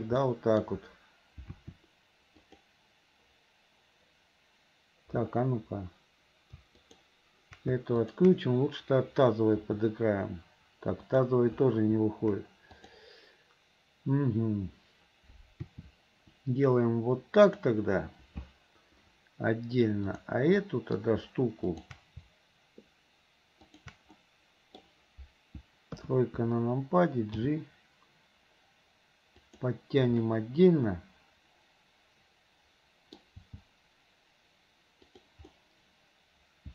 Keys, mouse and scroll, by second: 0.2 middle click, 1.5 r, 6.9 shift+click, 8.0 shift+click, 10.3 r, 12.9 click, 16.6 r, 20.1 click, 20.6 middle click, 21.7 shift+click, 23.7 shift+click, 24.2 middle click, 26.4 KP_3, 28.4 g, 30.2-33.4 middle drag, 33.5 g, 35.6-36.7 middle drag.